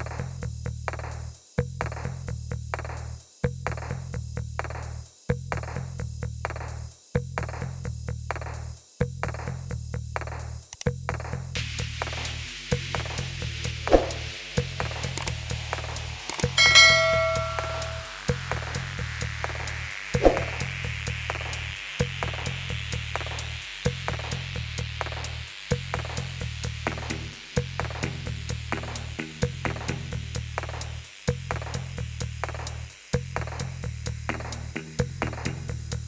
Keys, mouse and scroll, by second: 0.3 click, 2.9 click, 9.2 click, 11.9 click, 12.2 click, 13.1 click, 16.0 shift+click, 19.5 ctrl+i, 21.0 click, 23.9 click, 27.9 click, 28.6 click, 30.7 shift+click, 32.9 ctrl+i, 33.9 click.